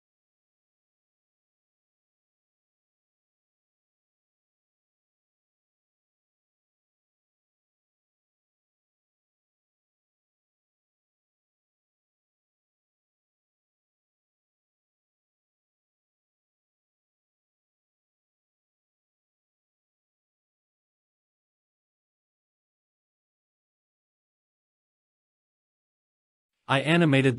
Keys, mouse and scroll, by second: 1.0 click, 3.3 KP_0, 4.1-5.8 scroll down 6, 4.6 middle click, 5.8 scroll up 2, 6.8-7.6 scroll down 1, 8.7-9.4 typing, 10.0 Return, 11.0 g, 11.1 y, 12.4 click, 13.2 KP_0, 13.8 space, 15.5 space, 16.8 click, 17.6 scroll down 2, 18.0 click, 18.2-26.8 typing, 18.6 scroll up 3, 19.4 scroll down 2, 19.7 click, 21.4 click, 22.4-22.8 drag, 23.2 click, 24.7 click, 25.0 scroll up 3, 25.2 Escape, 25.9 click, 26.5 click, 27.1 scroll down 3.